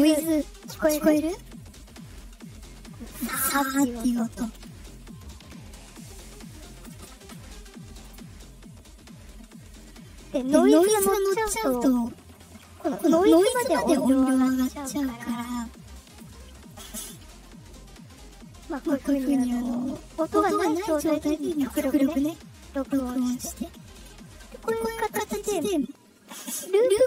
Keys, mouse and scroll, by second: 0.1-6.6 drag, 7.8 click, 8.1 scroll down 2, 15.9-18.3 drag, 21.1 click, 22.7-26.2 drag.